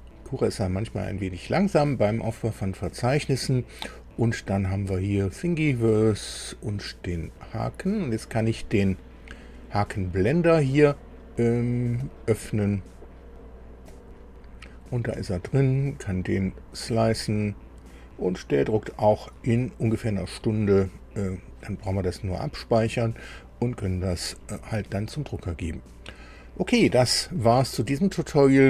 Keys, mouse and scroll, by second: 5.1 click, 6.0-6.4 scroll down 2, 7.2 click, 11.8 click, 13.7 click.